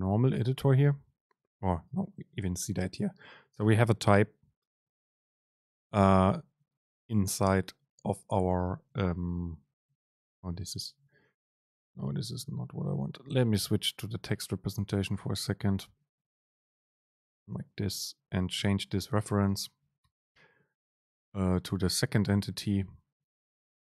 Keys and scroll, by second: 19.1 super+space.